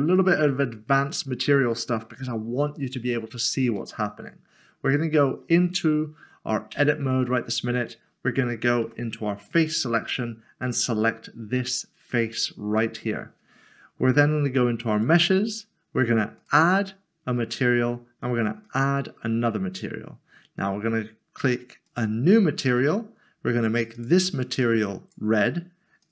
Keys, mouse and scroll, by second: 0.1 click, 2.5 scroll up 1, 3.1 shift+middle click, 6.7 Tab, 8.8 3, 14.9 click, 18.6 click, 21.8 click, 24.0 click.